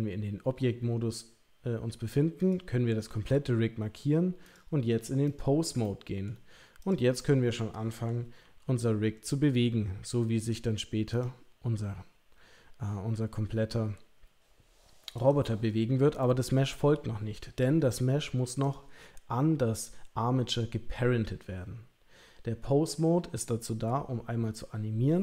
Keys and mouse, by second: 2.4 click, 4.5-5.4 drag, 5.8-6.2 middle drag, 6.8 click, 7.1-8.0 middle drag, 8.4 r, 11.1 click, 11.6 r, 16.2-16.6 middle drag, 18.6 click.